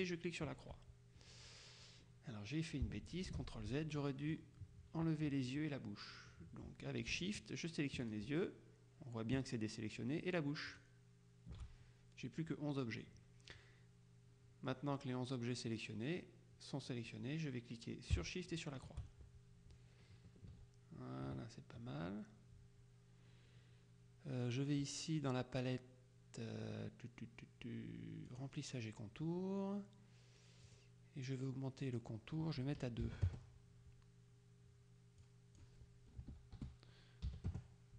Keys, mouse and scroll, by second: 0.1 shift+click, 3.4 ctrl+z, 4.0-5.0 drag, 8.1 shift+click, 10.8 click, 18.6 shift+click, 20.6 KP_Subtract, 21.4 KP_Subtract, 28.4 click, 30.7 click, 33.2 KP_2, 33.4 KP_Enter, 35.3 click, 36.3 BackSpace, 37.4 KP_2, 37.6 KP_Enter.